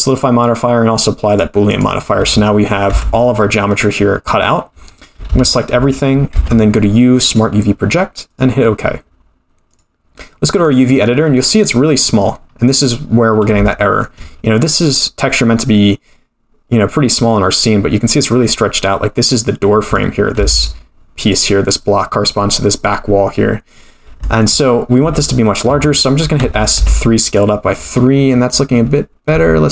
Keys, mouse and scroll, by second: 1.3-2.5 drag, 2.9 Tab, 3.4-4.0 scroll down 2, 3.7-4.9 middle drag, 4.9-5.2 scroll up 1, 5.2 a, 6.3 u, 9.6-10.8 drag, 12.0-12.8 scroll up 9, 13.1-13.5 scroll down 1, 13.6 shift+middle click, 19.3-19.9 scroll down 2, 19.9 click, 20.4 3, 20.5 click, 21.3 click, 23.7-24.2 scroll down 2, 24.2 shift+middle click, 24.6-25.0 scroll down 3, 25.0 a, 26.4 s, 28.0-29.0 scroll up 7, 29.0-29.3 scroll up 2, 29.3 s.